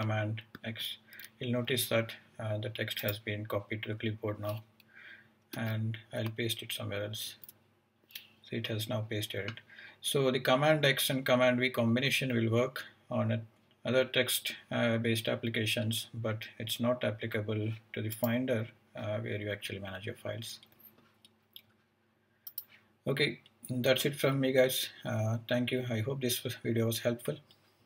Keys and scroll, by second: 0.6 super+x, 5.5 Return, 7.3 super+v.